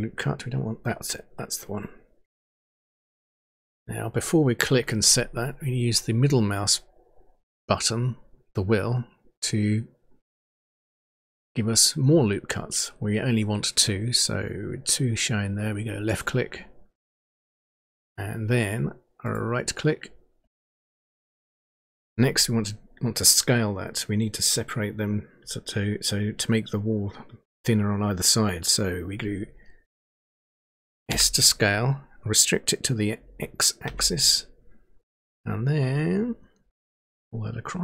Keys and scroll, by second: 31.1 s, 33.9 x.